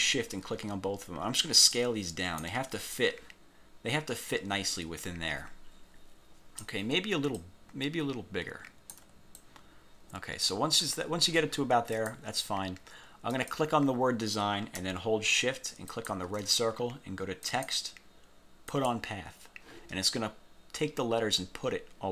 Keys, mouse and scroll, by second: 1.9 ctrl+click, 3.1-6.9 ctrl+drag, 7.5-9.3 ctrl+drag, 9.5-10.7 ctrl+drag, 12.1 click, 13.5 click, 16.0 shift+click, 17.6 click, 18.8 click.